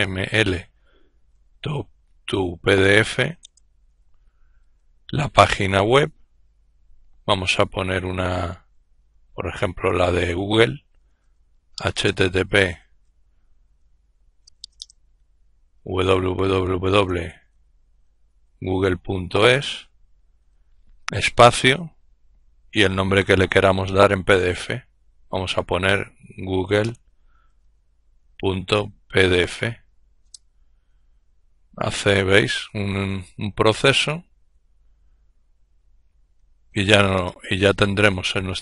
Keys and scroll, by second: 0.0-4.2 typing, 7.3-9.2 typing, 10.7-19.4 typing, 24.5-29.6 typing, 29.8 Return, 31.8 typing, 33.6 typing, 35.7-36.7 typing.